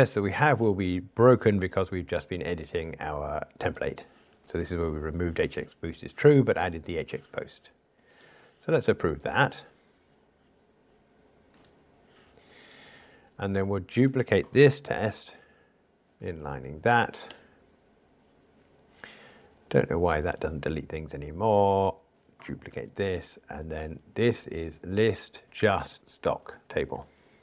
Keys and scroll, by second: 12.1 super+F11, 16.2 alt+super+n, 20.1 super+BackSpace, 21.1 alt+Up, 22.7 super+d.